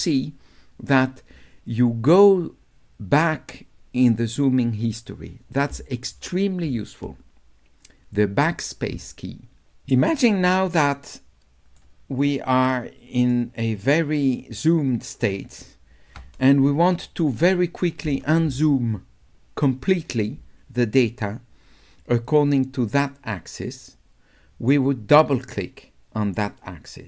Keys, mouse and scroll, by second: 10.7-11.8 shift+right drag, 12.7 shift+right click, 14.4 shift+right click.